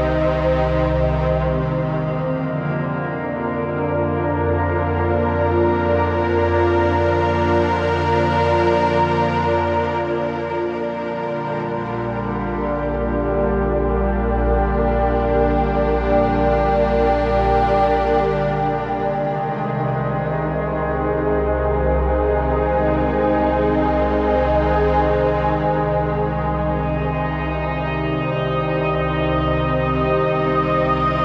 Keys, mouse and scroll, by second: 0.2 alt+shift+click, 3.9 click, 4.7-5.7 scroll down 1, 5.7-7.1 drag, 20.2 typing, 20.9 shift+click, 21.7 z, 21.8 click, 22.0 space, 22.1 click, 22.3 z, 22.4 click, 25.4 shift+click.